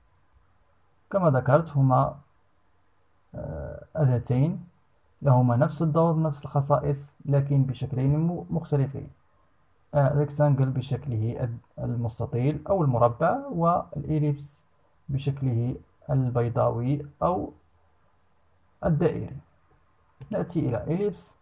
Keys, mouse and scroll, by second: 19.8 click.